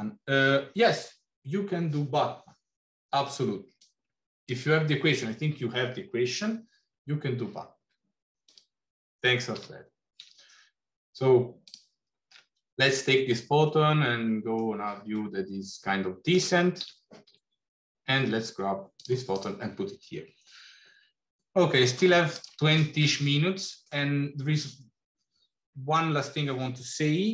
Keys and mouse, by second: 8.4 click, 9.5 g, 14.0 middle click, 15.0-16.4 middle drag, 16.7 g, 19.5 click, 23.2 middle click.